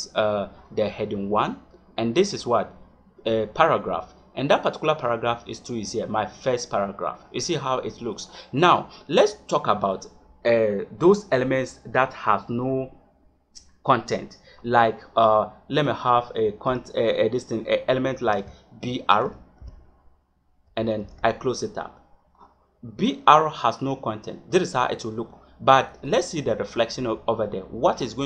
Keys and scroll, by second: 16.6 Return, 18.2 shift+,, 19.1 b, 19.5 r, 20.9 shift+..